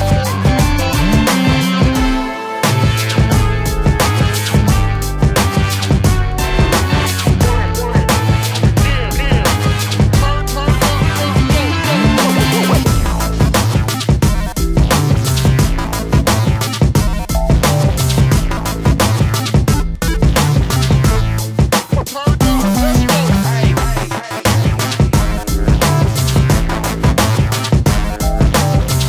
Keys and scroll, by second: 0.8 shift+m, 5.1 space, 7.3 Escape, 8.5 ctrl+c, 8.8 Escape, 9.0 Escape, 9.2 Escape, 10.8 ctrl+v, 28.0 shift+space, 28.1 Escape.